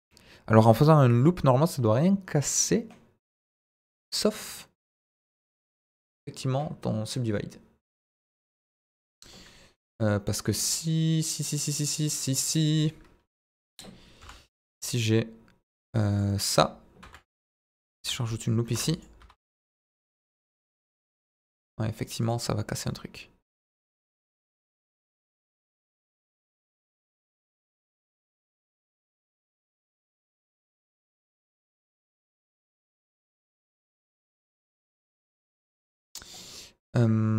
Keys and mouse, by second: 13.5 middle drag, 14.2 Delete, 14.5 shift+a, 17.1 ctrl+3, 17.7 Tab, 18.6 ctrl+r, 19.2 Escape, 19.5 Tab, 19.9-20.4 middle drag, 20.9-21.8 middle drag, 22.1 right click, 22.8-23.7 middle drag, 23.9 Tab, 24.5 s, 25.0 click, 25.2 Tab, 25.3-26.1 middle drag, 26.2 Tab, 26.5 s, 29.6 click, 29.9 middle click, 31.1 g, 31.2 middle click, 33.4 click, 33.6 middle click, 33.9 Tab, 34.0-37.3 middle drag.